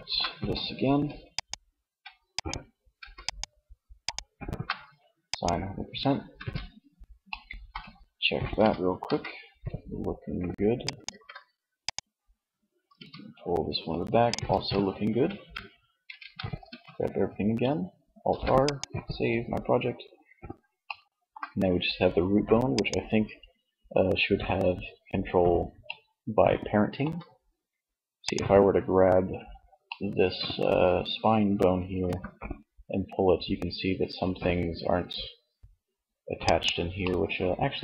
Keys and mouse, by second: 0.3-2.1 middle drag, 5.4 Tab, 7.8 r, 10.2 ctrl+z, 12.0 r, 13.6 ctrl+z, 15.0 a, 15.2 a, 15.8 alt+r, 17.2 ctrl+s, 21.8-23.6 drag, 24.8-26.6 middle drag, 27.6-29.3 right drag, 29.3 middle click, 29.5-31.0 middle drag, 31.0 g, 35.7 click, 36.2-37.7 middle drag.